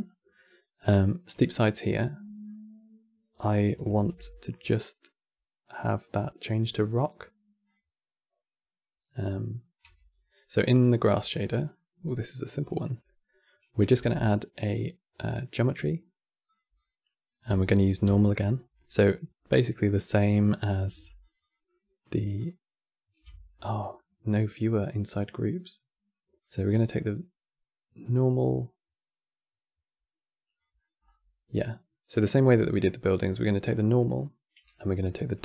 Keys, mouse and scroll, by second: 3.6 shift+a, 5.4 click, 7.3 click, 9.5 Tab, 10.3 scroll down 4, 10.4-11.1 middle drag, 11.1-11.4 scroll up 4, 11.4-13.6 middle drag, 13.6 shift+a, 17.3 ctrl+shift+click, 17.5 ctrl+shift+click, 20.9 ctrl+shift+Left, 20.9 click, 21.1 ctrl+shift+Left, 21.1 click, 22.1 ctrl+shift+Left, 22.1 click, 23.2-24.1 middle drag, 24.1-24.5 scroll up 2, 24.5-26.1 middle drag, 26.1 click, 30.5 middle click, 30.7 scroll up 8, 31.2 click, 32.1-34.9 middle drag, 34.9 q.